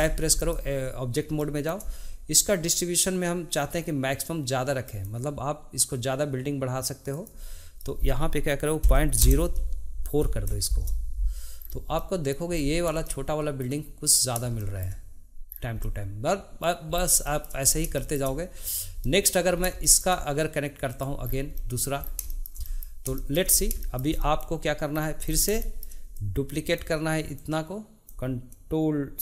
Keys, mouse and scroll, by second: 0.3 click, 1.4-4.8 shift+middle drag, 4.8-10.3 drag, 11.6-11.9 scroll down 2, 11.9 middle click, 12.5-13.0 scroll up 3, 13.0-14.1 shift+middle drag, 14.1-14.4 scroll down 1, 14.6 shift+middle click, 15.4-15.8 scroll down 2, 15.8-16.9 middle drag, 16.9 scroll up 2, 17.2 shift+middle click, 18.0-18.7 shift+middle drag, 18.7 click, 19.0-19.6 middle drag, 19.6 scroll up 1, 19.8-20.9 shift+middle drag, 20.9 click, 21.2 scroll down 2, 21.5 middle click, 22.0 scroll down 2, 22.3-23.5 shift+middle drag, 23.5 scroll up 1, 23.8-25.0 shift+middle drag, 25.0-25.3 scroll down 2, 25.6 shift+middle click, 26.2-29.2 drag.